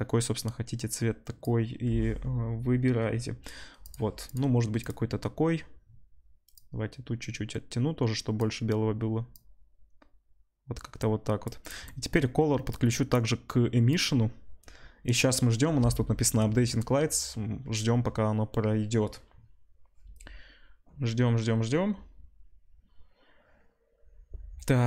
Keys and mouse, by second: 3.8 click, 4.3-6.5 middle drag, 6.5-11.7 drag, 11.7-12.7 middle drag, 12.7-24.8 drag.